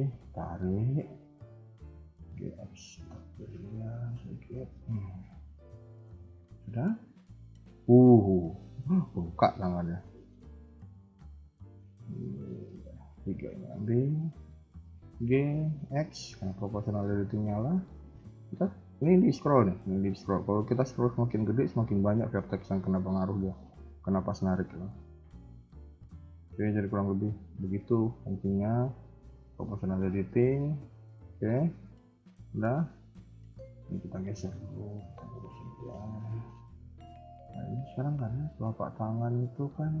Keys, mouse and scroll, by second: 1.0 KP_1, 2.1 g, 3.6 s, 4.6 KP_3, 5.5 middle click, 6.1 KP_1, 6.9 KP_3, 7.1 KP_1, 10.6 middle click, 11.7 click, 12.4 shift+click, 13.2 shift+click, 13.4 KP_3, 13.9 KP_1, 14.9 g, 28.1-29.7 scroll down 2, 29.7 scroll down 1, 29.7 KP_3, 29.8 KP_1, 30.1-30.8 scroll up 2, 30.8-31.2 scroll down 2, 31.2 shift+middle click, 31.6 scroll up 2, 32.1 shift+middle click, 33.1 alt+click, 33.9 g, 36.8-37.4 scroll down 4, 36.9 Tab, 37.4-37.9 scroll up 2, 37.9 KP_3, 39.3 shift+middle click, 39.6-40.0 scroll up 2, 39.7 Tab.